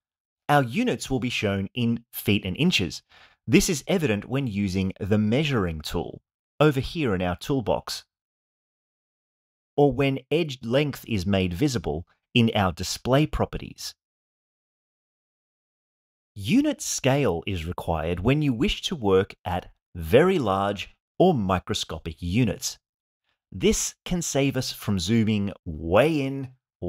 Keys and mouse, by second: 0.4 click, 5.2 click, 5.4-7.2 drag, 8.8 Tab, 10.5-13.8 drag, 18.8-21.0 drag, 22.7-23.9 drag.